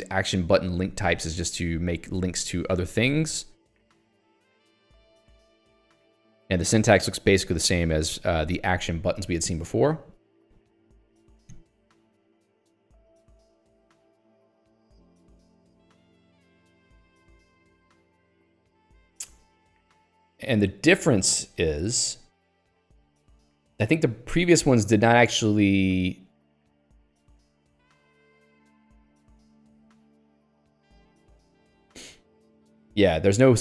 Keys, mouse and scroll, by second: 3.2 scroll down 1, 4.0 scroll down 1, 5.3 scroll down 1, 5.9 scroll down 3, 9.5-9.9 scroll down 2, 12.7 middle click, 20.8 middle click, 21.8 click, 22.0 Escape, 26.5 click, 27.2 middle click, 30.2 middle click, 32.0-32.8 scroll down 2, 32.8-33.6 scroll down 1.